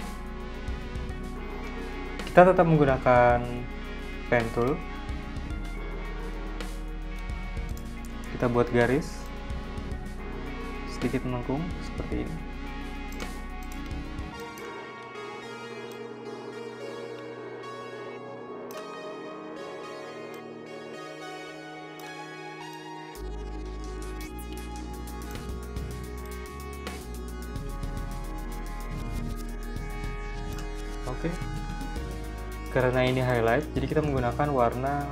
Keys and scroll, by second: 13.2-14.7 typing, 29.9 v, 32.2 z, 32.8 v.